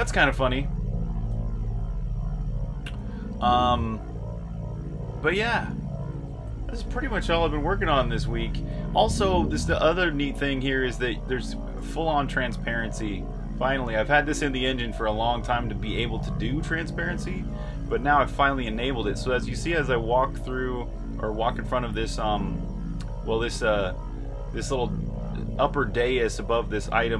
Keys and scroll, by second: 0.3-6.8 typing, 8.4-9.3 typing, 10.8-13.3 typing, 14.3 typing, 15.5-18.6 typing, 20.3 typing, 22.6-24.6 typing, 26.6-27.1 typing.